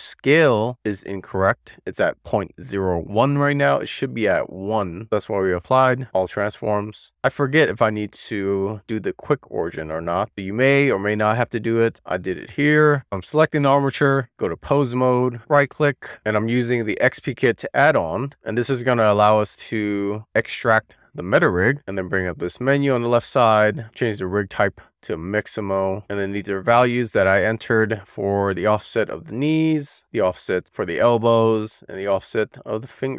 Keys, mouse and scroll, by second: 1.0 click, 1.5 click, 2.6 click, 3.1 click, 4.2 click, 5.3 ctrl+a, 12.2 alt+q, 13.0 click, 13.6 click, 14.3 click, 16.6-22.0 right drag, 22.0 click, 24.2-25.6 drag, 28.1-29.8 drag, 29.4 BackSpace, 29.8 middle click, 30.0-31.3 drag, 32.7 click.